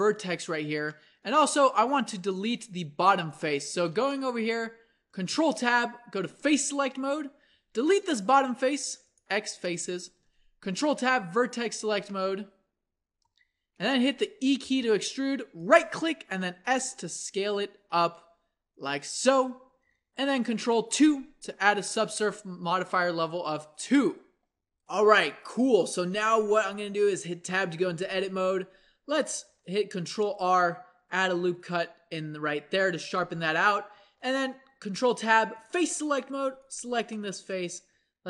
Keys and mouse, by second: 1.1-4.6 middle drag, 5.3 ctrl+Tab, 7.6 x, 10.2 ctrl+Tab, 14.6 e, 16.3 s, 19.2 Tab, 20.9 ctrl+2, 27.4 Tab, 28.0 a, 29.8 ctrl+r, 33.9 ctrl+Tab.